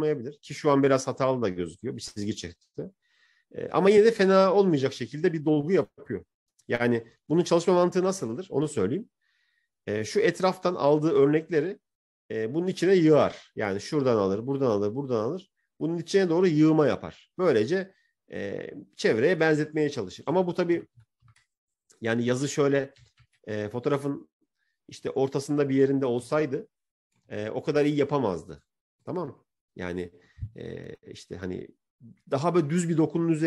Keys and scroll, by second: 7.2 ctrl+z, 7.8 ctrl+z, 20.9 ctrl+-, 22.9 ctrl+-.